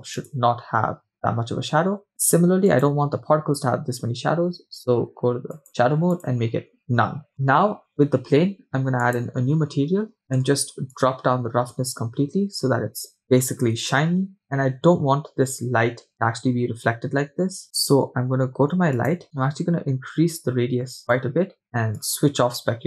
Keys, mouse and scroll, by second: 2.7 click, 5.6-6.4 drag, 7.3 click, 9.0-9.7 drag, 10.2 middle click, 11.0-13.4 drag, 19.0-21.3 drag, 22.0-22.8 drag.